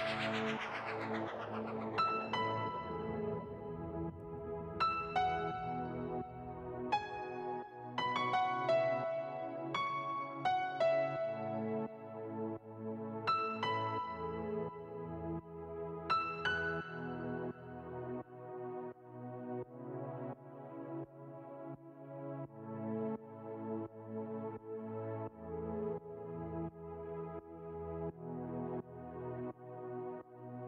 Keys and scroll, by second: 2.3 ctrl+a.